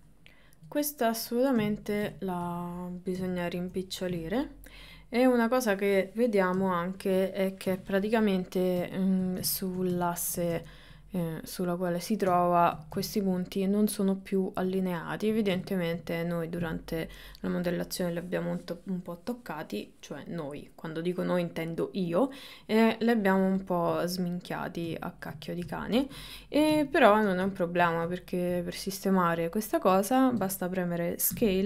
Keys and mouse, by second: 0.0 click, 1.8 ctrl+middle click, 2.2-3.2 shift+middle drag, 3.2 KP_1, 3.6 KP_3, 4.4-5.8 middle drag, 6.6 KP_1, 7.7 KP_3, 10.0 shift+middle click, 10.8 ctrl+middle click, 12.4 shift+middle click, 13.1 ctrl+middle click, 15.1 shift+middle click, 15.7 ctrl+middle click, 24.2 ctrl+middle click, 25.1 shift+middle click, 27.0 ctrl+middle click, 28.3 ctrl+middle click, 30.1 shift+middle click, 31.4 s.